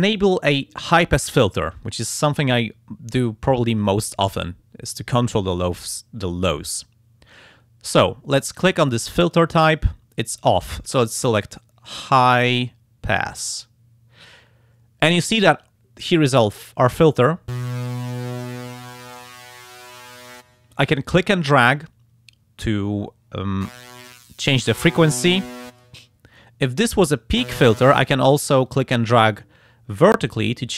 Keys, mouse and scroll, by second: 9.2 click, 13.3 click, 18.1-20.5 drag, 24.0-26.0 drag, 28.7-30.7 drag.